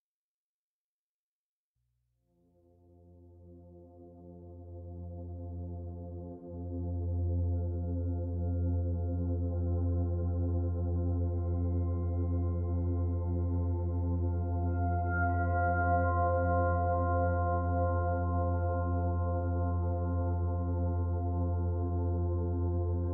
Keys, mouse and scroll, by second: 1.8 middle click, 5.1 middle click, 5.8-6.3 scroll up 3, 6.3 shift+middle click, 7.3 click, 8.1 shift+click, 9.0 shift+middle click, 9.5 shift+click, 9.9 shift+click, 11.1 shift+click, 11.4 middle click, 14.4 s, 20.1 middle click, 21.4 middle click.